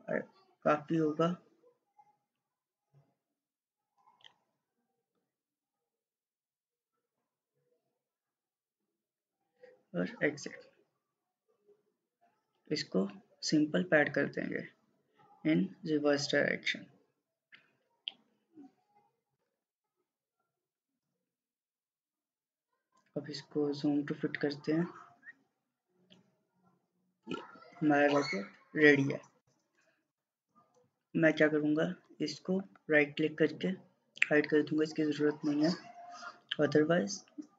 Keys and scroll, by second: 19.2-20.0 typing.